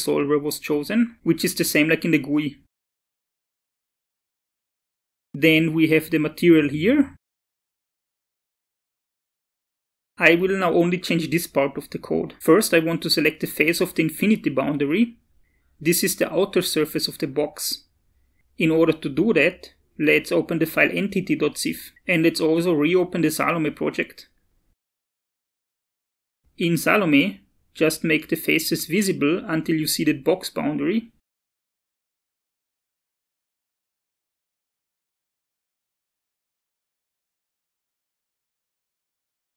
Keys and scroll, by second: 2.6 shift+super+s.